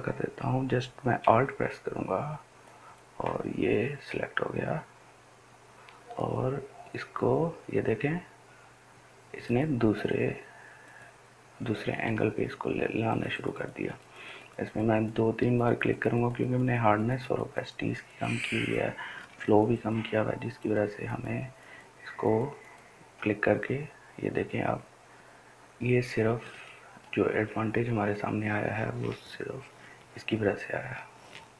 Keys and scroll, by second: 1.1 ].